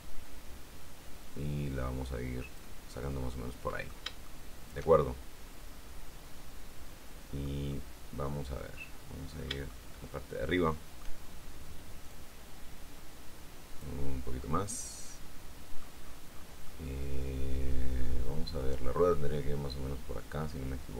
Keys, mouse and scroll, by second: 3.2-4.3 middle drag, 4.4-7.8 shift+middle drag, 7.9-9.8 middle drag, 9.8 shift+scroll up 1, 9.9-11.4 shift+middle drag, 12.3-14.2 drag, 14.6-16.2 middle drag, 16.2-16.7 scroll down 2, 16.7 scroll down 1, 16.8-18.6 middle drag, 18.6 click.